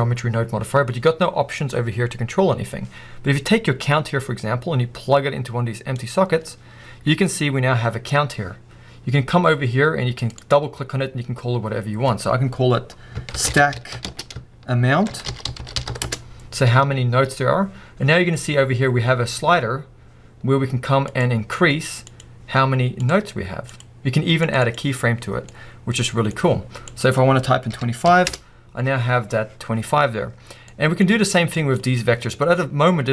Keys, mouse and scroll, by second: 6.0 click, 16.3 Return, 21.2 click, 23.7 click, 25.2-25.5 scroll down 2, 25.5-28.3 middle drag, 28.3 Return.